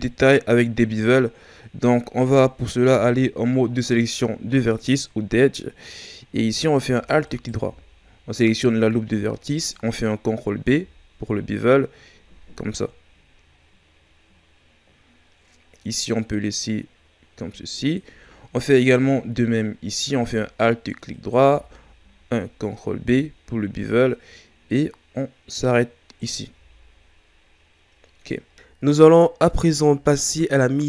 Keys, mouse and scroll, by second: 1.3-1.9 scroll up 2, 2.9 ctrl+Tab, 7.3 alt+right click, 10.6 ctrl+b, 21.1 alt+right click, 22.9 ctrl+b, 26.6 a, 26.9 scroll down 3, 30.2-30.8 scroll up 4.